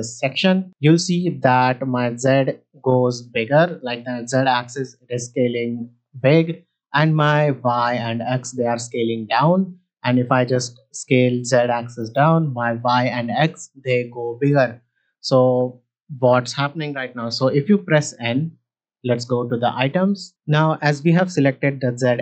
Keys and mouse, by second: 0.5 s, 0.6 z, 2.4-2.8 right drag, 2.8 middle click, 2.8 z, 4.0 middle click, 4.5 s, 4.7 z, 6.6-7.8 right drag, 8.2 middle drag, 8.7 s, 8.9 z, 14.8 right click, 17.7 n, 19.2 click, 20.1 middle click.